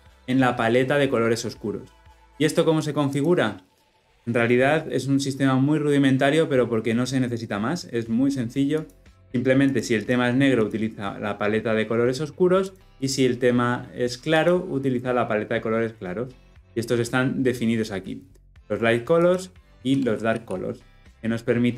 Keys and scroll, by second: 20.2 ctrl+p.